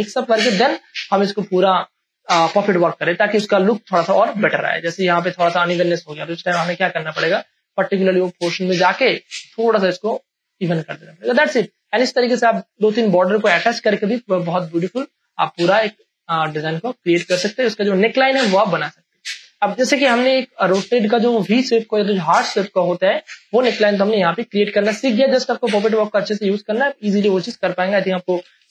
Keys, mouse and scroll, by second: 0.6 ctrl+click, 5.2 space, 5.4 ctrl+click, 7.1-7.6 scroll down 1, 8.0-11.4 drag, 11.4 space, 11.6 ctrl+click, 12.7 Return, 15.0 space, 15.5-17.2 ctrl+drag, 17.2 click, 17.7 m, 18.4 click, 19.3 space, 19.5 ctrl+click, 24.0 ctrl+j, 24.8 click, 24.8 click, 25.2 space, 25.4 click, 25.5 click, 25.9 click, 27.8 ctrl+j, 28.2 ctrl+a, 28.6 alt+e.